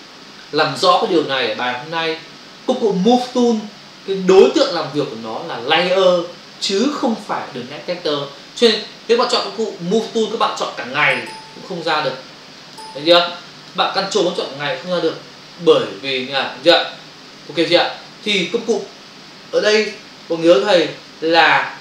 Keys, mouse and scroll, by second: 10.1 click, 11.1 double click, 11.3 click, 12.0 click, 12.1 double click, 12.5 click, 12.8 click, 13.6 click, 13.7 click, 14.9 ctrl+click, 17.5 ctrl+click, 20.2 click, 21.3 ctrl+alt+z.